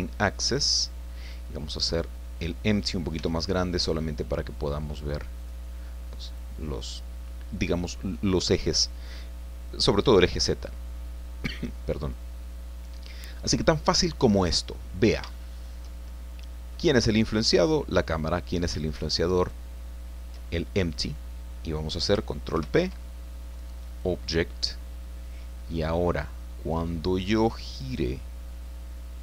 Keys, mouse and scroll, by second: 0.8 scroll down 2, 1.7 click, 2.5 middle click, 3.1 s, 5.4 click, 12.1 click, 13.0-13.3 scroll down 2, 14.6-14.9 scroll up 1, 15.3-16.3 shift+drag, 16.3 middle click, 17.5 right click, 19.4 shift+right click, 22.5 ctrl+p, 23.9 click, 24.8-25.2 scroll down 1, 25.2 middle click, 26.5 click, 27.8 right click, 28.6-29.2 middle drag.